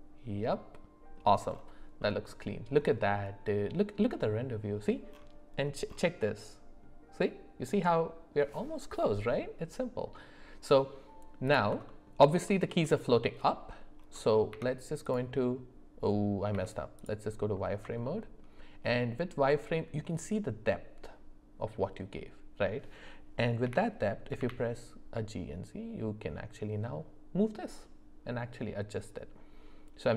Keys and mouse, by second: 2.0 middle click, 9.3-10.8 middle drag, 11.9 alt+middle click, 12.4 alt+middle click, 14.5 z, 16.5 z, 18.0 shift+middle click, 23.6 g.